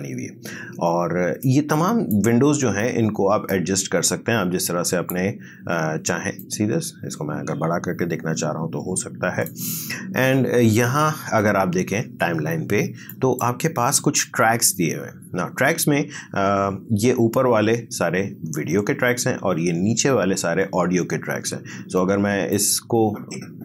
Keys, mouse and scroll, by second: 1.4-11.9 drag, 14.0 click, 22.5-23.6 drag.